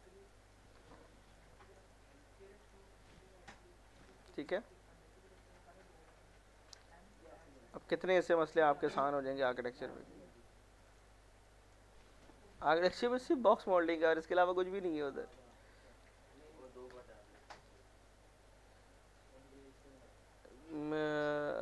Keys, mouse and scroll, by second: 0.3 alt+middle click, 1.0 F4, 1.3 middle click, 1.9 middle click, 2.6 click, 4.0 middle click, 4.3 scroll down 1, 4.6 z, 4.8 middle click, 5.3 scroll down 1, 5.6-6.9 alt+middle drag, 7.3 scroll down 1, 7.5 alt+middle click, 7.9 scroll up 1, 8.1-9.4 middle drag, 9.4 click, 11.4 middle click, 11.9 scroll up 1, 12.3 F4, 14.9 click, 16.1 alt+r, 16.5 alt+middle click, 18.9 alt+middle click, 19.4 scroll up 1, 19.9 alt+middle click, 20.2 scroll down 1, 20.5 alt+middle click.